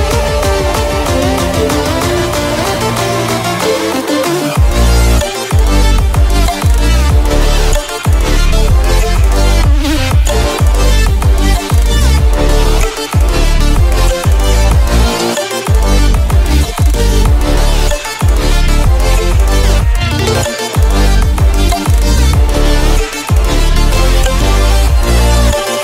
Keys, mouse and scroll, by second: 0.8-3.4 drag, 3.4 scroll up 1, 4.9 click, 8.4 v, 10.2-11.3 scroll up 1, 11.6-17.0 alt+drag, 17.0 scroll down 1, 20.4-25.8 alt+drag.